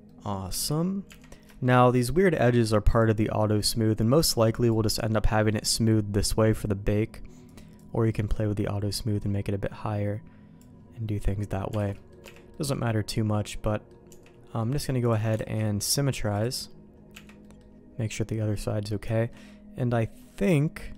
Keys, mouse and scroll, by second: 0.1 middle click, 0.5 Tab, 1.1 Tab, 1.5 shift+middle click, 2.9 click, 4.5 click, 7.5-10.6 drag, 11.0 middle click, 11.8 alt+a, 11.9 middle click, 12.2 Tab, 12.5 middle click, 13.1 middle click, 14.1 Tab, 14.6 middle click, 15.0 click, 15.5 alt+x, 16.4 click, 17.1 Tab, 17.4 middle click, 18.7 middle click, 19.1 middle click, 19.5 middle click, 20.2 middle click.